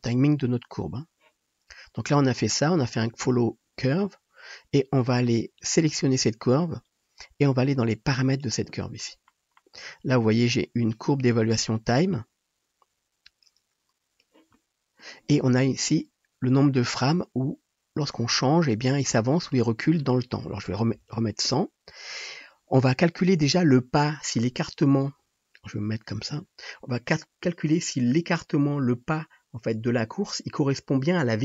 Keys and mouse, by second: 5.8-8.2 drag, 8.2 middle click, 8.5-12.1 drag, 12.1-16.1 middle drag, 21.2 KP_0, 26.3 KP_Multiply.